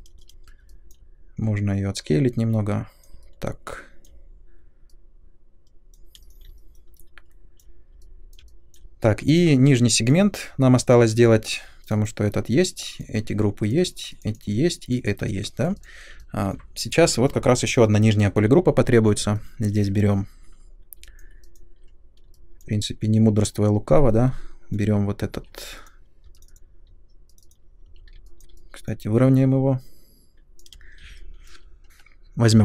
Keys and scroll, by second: 0.1 r, 6.1 space, 25.3-26.2 typing, 27.8 r, 30.7 space, 32.5 l.